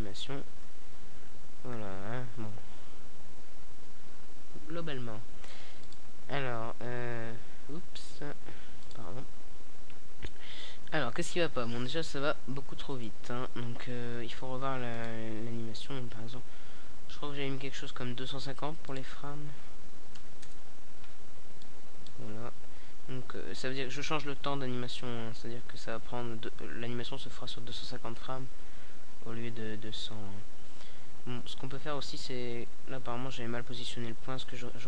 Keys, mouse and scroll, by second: 3.1-4.7 middle drag, 7.0 middle click, 7.1-8.5 right drag, 8.5 click, 9.1 middle click, 9.4-10.9 right drag, 11.9-13.2 middle drag, 13.2-14.8 drag, 15.8-16.5 drag, 16.5 alt+a, 20.1 middle click, 24.4 alt+a, 26.7-29.9 middle drag, 30.1 right click, 34.5 p.